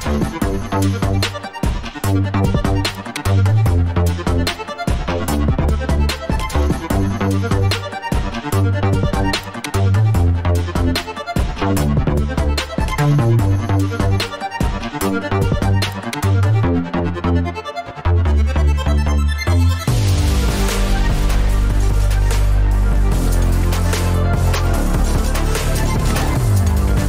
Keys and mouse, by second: 4.5 ctrl+r, 6.3 click, 6.6 Tab, 6.7 middle click, 7.1 middle drag, 7.6-9.7 middle drag, 10.3 `, 12.4 1, 12.9 click, 13.9 right click, 14.4 alt+z, 15.3 click, 21.0 click, 25.5 drag.